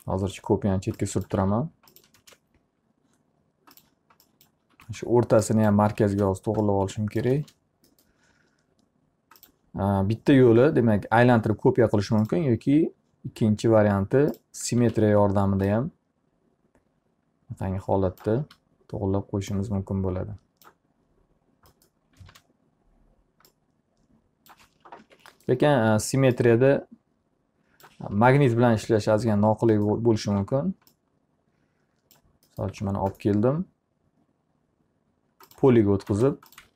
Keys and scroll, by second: 0.4 ctrl+z, 1.9 alt+a, 2.7 ctrl+space, 5.4 w, 6.6 space, 15.0 e, 18.9 w, 22.8 space, 25.5 ctrl+z, 30.8 s, 36.3 space.